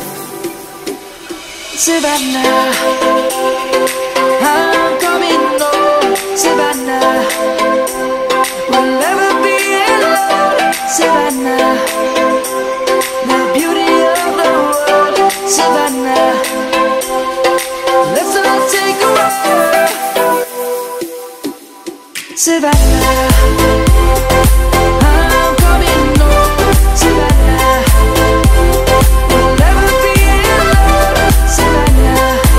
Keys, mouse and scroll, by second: 0.9 Delete, 1.7 click, 2.3 F10, 2.7 click, 6.4-8.8 typing, 9.4 click, 11.3-13.5 typing, 13.9 click, 15.9-17.8 typing, 18.3 Return, 19.2-20.3 drag, 19.5-20.9 typing, 21.9 click, 24.6 F10, 25.0 click, 26.0 scroll down 1, 26.5 click, 27.5 typing, 27.9 Return, 29.8 click, 30.9-31.9 typing.